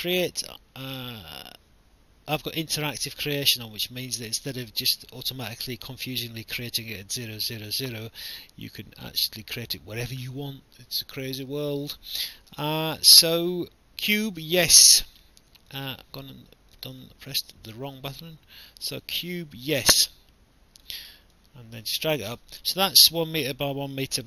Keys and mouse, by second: 14.2 click, 15.7 click, 17.0 click, 18.9 click, 21.3 click, 22.9 alt+click.